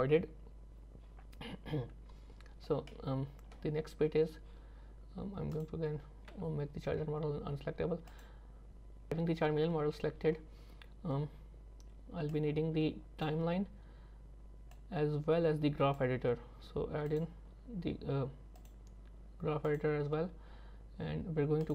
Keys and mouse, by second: 3.0 middle click, 5.5 click, 8.1 click, 9.6 KP_3, 12.4 middle click, 12.6 click, 12.7 middle click, 12.8 click, 12.9 middle click, 13.0 click, 14.7 click, 14.7 middle click, 15.2 click, 15.2 middle click, 17.1 click, 18.6-19.8 drag.